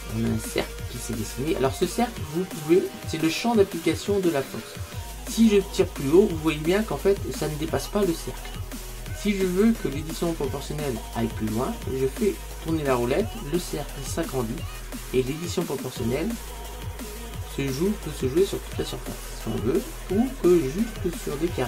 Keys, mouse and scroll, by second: 2.7 click.